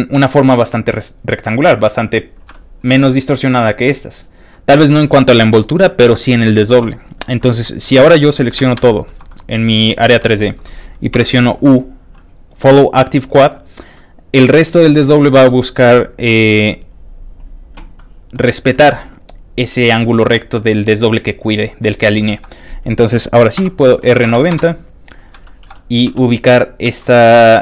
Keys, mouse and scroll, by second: 0.2 s, 0.7 y, 2.2 click, 2.5 shift+middle click, 3.1 shift+click, 3.7 click, 3.9 shift+click, 4.4 shift+click, 7.4 shift+middle click, 7.6 shift+middle click, 8.6 shift+a, 8.9 shift+middle click, 9.3 middle click, 10.2 shift+middle click, 11.2 shift+middle click, 16.2 click, 17.3 click, 17.9 middle click, 18.5 scroll down 2, 18.7 middle click, 23.6 shift+r, 24.2 KP_9, 24.3 KP_0, 24.6 Return, 25.4 shift+middle click, 25.7 shift+middle click, 26.1 shift+g, 26.6 click, 26.9 s.